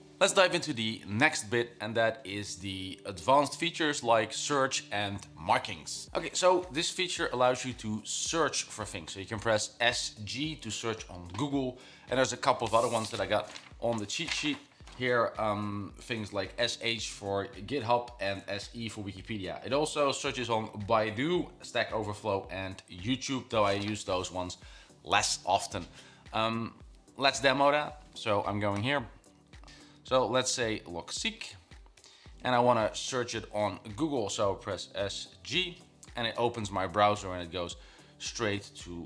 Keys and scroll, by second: 28.9 o, 29.6 Up, 29.6 Down, 31.8 typing, 34.5-35.1 typing.